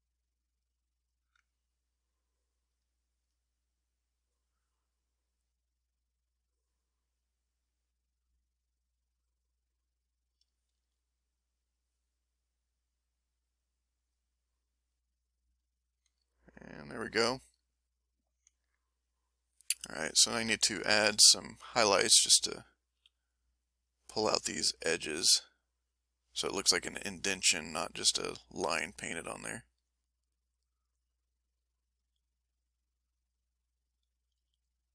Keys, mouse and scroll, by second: 2.6-4.4 ctrl+drag, 4.5 ctrl+click, 6.3-8.9 scroll up 1, 9.7 click, 10.8 ctrl+z, 11.7-14.3 ctrl+drag, 15.3 middle click, 16.2-17.3 ctrl+middle drag, 18.6 ctrl+middle click, 18.7 ctrl+middle click, 19.7 ctrl+click, 20.1 ctrl+click, 20.6 ctrl+click, 22.2 s, 23.0 f, 23.7 click, 24.6 click, 25.1 click, 25.6 click, 26.0 click, 26.5 click, 28.0 f, 28.2 click, 28.8 click, 29.2 click, 29.6 click, 30.2 click, 31.2 middle click, 32.0 f, 32.4 click, 32.9 click, 33.4 click, 33.8 click, 34.4 f, 34.6 click.